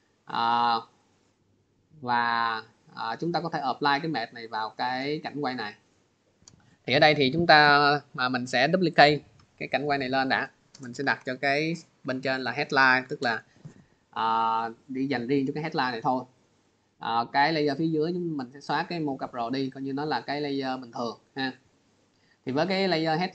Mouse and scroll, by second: 0.9 click, 6.6 click, 9.7 click, 10.1 click, 17.1 click, 18.4 click, 20.8 click, 21.3 click, 22.2 click.